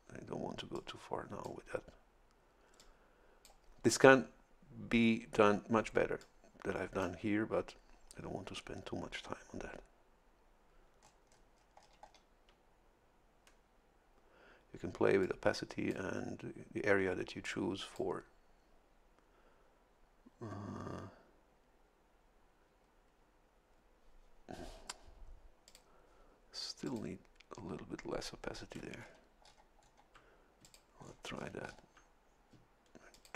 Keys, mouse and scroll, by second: 0.7 click, 2.8 click, 6.2-7.2 drag, 7.2-11.0 middle drag, 11.0 scroll up 1, 11.3 middle click, 15.2 click, 17.4 click, 25.7 click, 26.9 click, 29.0-30.1 ctrl+scroll down 6, 30.6 ctrl+click, 31.0-31.6 ctrl+scroll down 4, 33.1 ctrl+click.